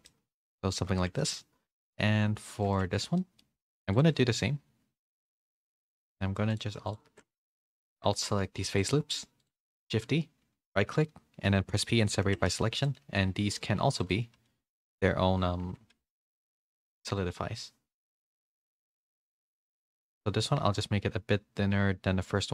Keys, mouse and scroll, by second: 0.0 middle click, 0.0 a, 1.1 shift+middle click, 1.7 click, 2.0 g, 2.8 Tab, 3.1 middle click, 3.5 3, 5.0 alt+shift+click, 5.8 alt+shift+click, 7.4 ctrl+z, 8.1 ctrl+z, 8.1 alt+shift+click, 8.7 alt+shift+click, 9.7 shift+d, 11.7 p, 12.2 Tab, 12.4 a, 12.6 a, 12.7 click, 13.0 g, 14.3 g, 15.6 Tab, 15.9 a, 16.3 Tab, 16.9-18.0 drag, 19.0-22.5 shift+drag.